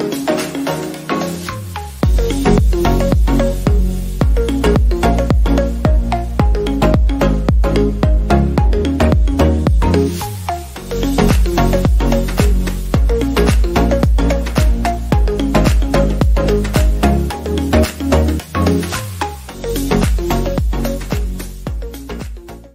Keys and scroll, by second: 2.7 ctrl+alt+z, 5.5 ctrl+alt+z, 13.5 ctrl+0, 16.5 ctrl+0.